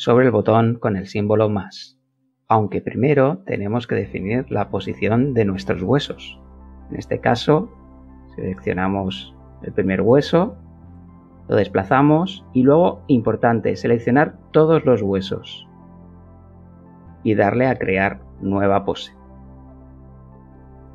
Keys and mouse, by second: 3.0 click, 5.6 g, 6.0 x, 7.6 KP_1, 8.4 Return, 9.9 a, 14.0 click, 15.3 click, 16.8 click, 17.6 click, 17.8 click, 18.4 click, 19.8 shift+a, 20.4 a.